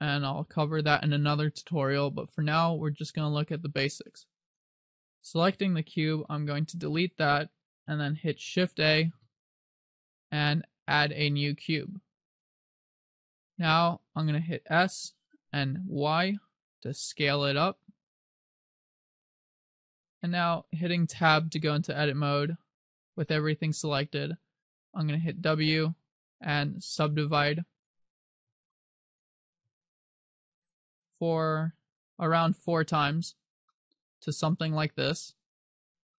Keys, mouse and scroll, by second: 5.3 right click, 6.2 x, 9.2 shift+a, 13.6-14.9 scroll up 1, 14.9 s, 20.3 click, 21.3 Tab, 25.6 w, 28.6 w, 29.8 w, 31.6 w, 33.8 middle click, 35.2 scroll up 1.